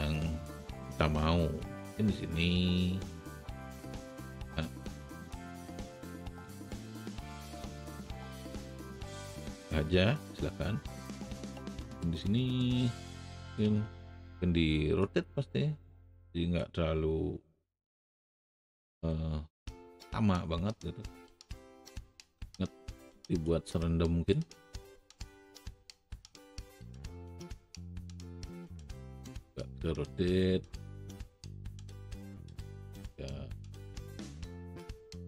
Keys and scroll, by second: 14.1 shift+e, 18.9 r, 25.0 alt+w, 25.7 alt+shift+w, 28.6 alt+shift+e, 34.1 r.